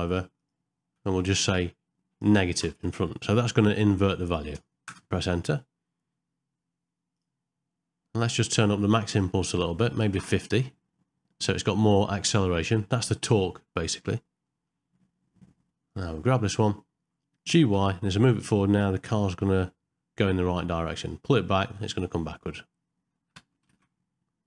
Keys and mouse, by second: 1.4 Left, 9.1-10.2 drag, 14.5 middle click, 15.9 click, 23.4 space, 23.8 shift+Left.